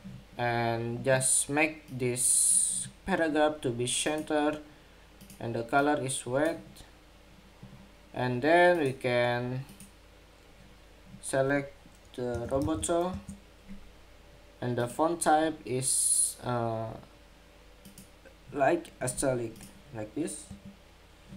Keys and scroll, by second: 20.2 Escape.